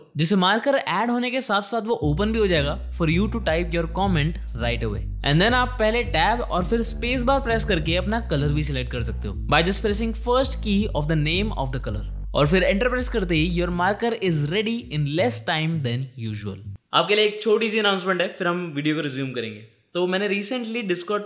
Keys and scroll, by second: 0.6-5.0 typing, 5.7 Tab, 6.7 space, 9.2 c, 10.3 Return.